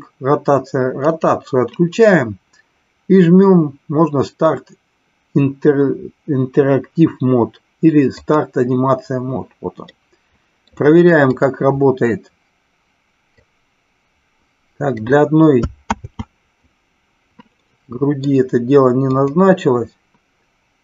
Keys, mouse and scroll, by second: 1.0 click, 8.1 click, 9.9-10.7 middle drag, 13.4-15.0 drag, 15.9 ctrl+z, 17.6 middle click, 19.1-20.6 drag.